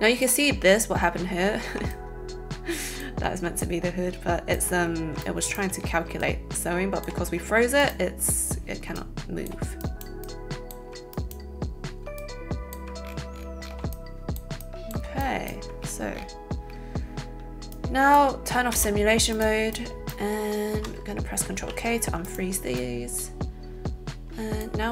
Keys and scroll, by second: 21.5 ctrl+k.